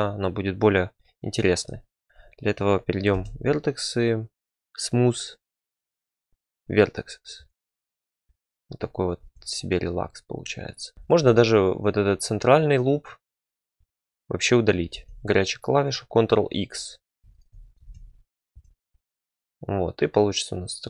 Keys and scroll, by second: 3.1 ctrl+v, 9.2 Tab, 14.9 ctrl+x, 17.8 ctrl+x, 18.5 Tab.